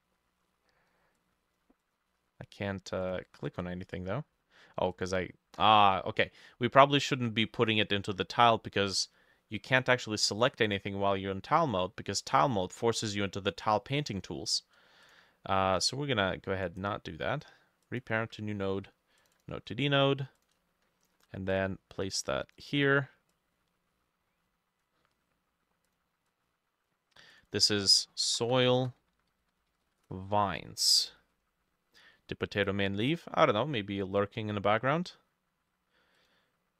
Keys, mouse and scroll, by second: 0.2-3.5 drag, 0.2 middle click, 10.5 double click, 16.7 right click, 19.4 double click, 21.1 shift+click, 26.3 double click, 27.5 double click, 28.0-30.6 typing, 32.0 middle click, 33.7 middle click.